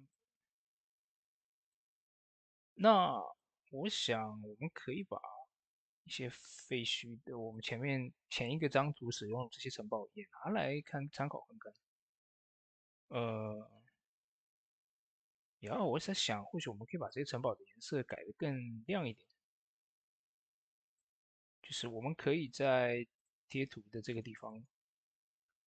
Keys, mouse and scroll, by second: 7.3 click, 11.3 click, 11.4 s, 16.8 s, 16.8 click, 23.3-24.0 scroll up 1, 24.0-25.6 drag.